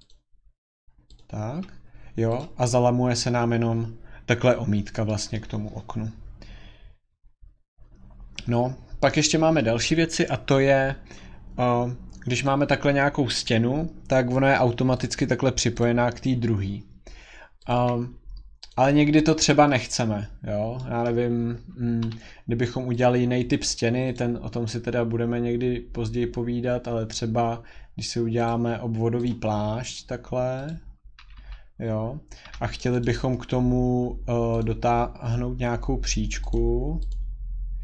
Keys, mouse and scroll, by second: 1.1 click, 2.4 click, 2.8-3.9 scroll, 4.3-5.1 scroll, 5.4-6.2 scroll, 8.5 scroll, 9.6-10.6 scroll, 12.4 click, 12.8 scroll, 15.0 click, 15.8 click, 17.7 click, 18.7 click, 20.2-20.9 scroll, 21.1-22.0 scroll, 22.0 Escape, 23.0 click, 24.2 click, 25.0-26.4 scroll, 28.4 click, 29.3 click, 30.7 click, 31.2 Escape, 31.4 Escape, 31.5-32.4 scroll, 32.5 Escape, 32.8 click, 33.1 right click, 34.6 click, 35.6 scroll, 36.5 click, 37.1 click, 37.7 scroll.